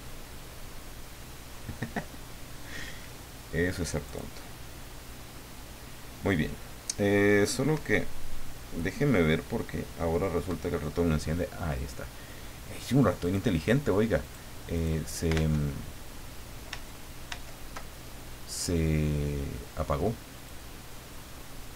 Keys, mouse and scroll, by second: 13.2 click, 14.2 click, 14.7 click, 15.5 alt+Tab, 17.2 alt+Tab, 20.4-21.7 drag.